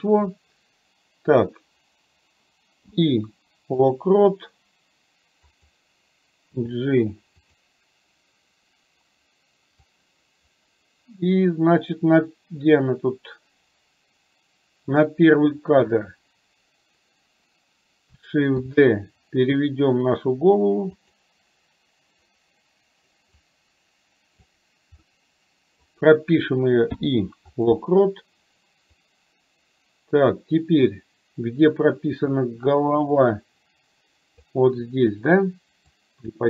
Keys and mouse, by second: 5.5 click, 9.9-15.1 drag, 18.6 shift+d, 23.6 click, 25.1 middle click, 29.1-34.5 drag, 36.0-36.4 drag.